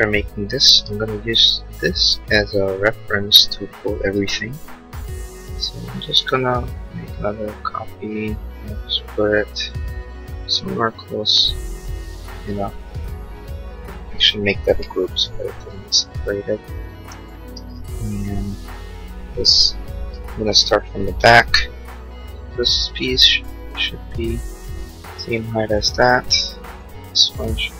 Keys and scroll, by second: 4.1 m, 14.7 g, 17.5 space, 21.6 p.